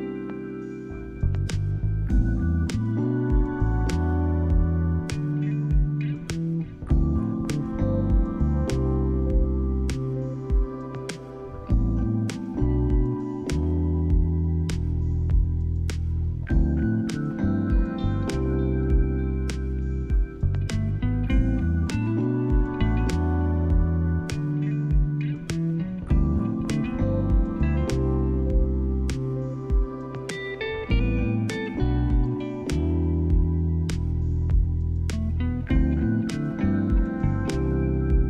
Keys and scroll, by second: 6.6 space, 13.1 space, 16.0 space, 23.0 space, 30.6 shift+space.